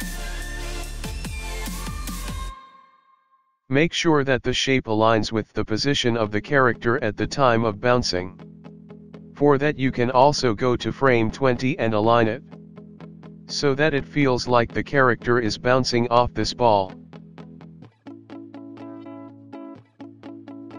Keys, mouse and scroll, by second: 2.7-3.9 scroll down 4, 5.0 click, 5.0 g, 5.4-6.6 scroll up 4, 7.2 click, 9.4 click, 9.8 click, 15.8 click, 16.3 click, 16.5 click, 20.5 click.